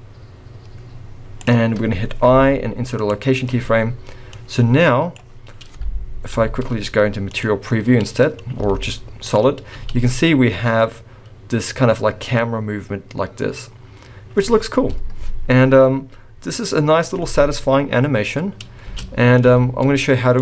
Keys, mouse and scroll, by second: 2.3 i, 4.4 click, 6.3 z, 8.6 z, 9.7 space, 18.9 space, 19.4 z.